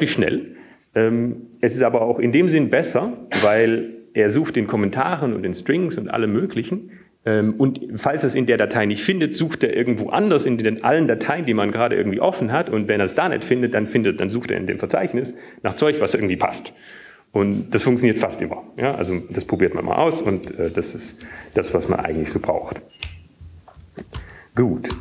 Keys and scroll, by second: 0.8 alt+/, 1.4 alt+/, 3.9 alt+/, 6.1 alt+/, 23.8 BackSpace.